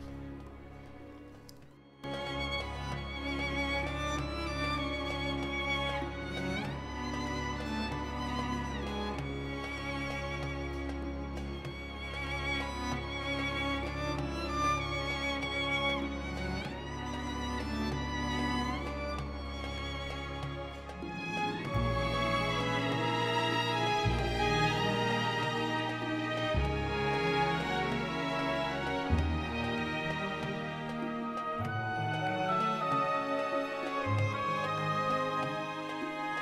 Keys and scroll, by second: 6.2 f, 15.3 j, 17.1 3, 19.8 s, 20.4 x, 21.2 0, 22.6 Return, 25.3 1, 28.2 1, 29.5 shift+z, 32.0 g, 35.5 g.